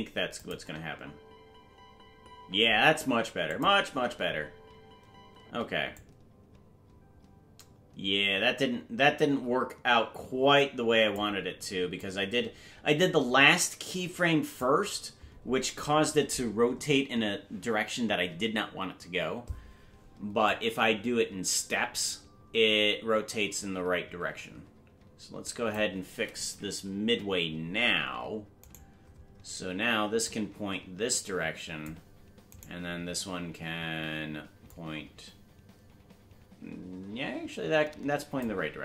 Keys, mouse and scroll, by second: 0.3 click, 0.5 space, 3.5 click, 3.5 space, 3.8 space, 5.9-11.1 drag, 5.9 space, 12.0-14.6 drag, 20.4-25.7 drag, 27.1 Left, 28.9 right click, 30.2-31.8 drag, 32.6 right click, 34.6-38.4 drag.